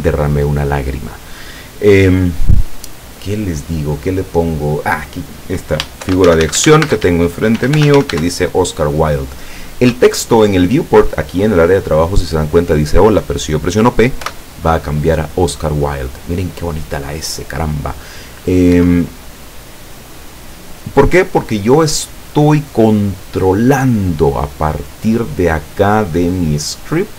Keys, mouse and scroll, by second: 6.1-8.1 typing, 14.2 p, 18.8 Escape.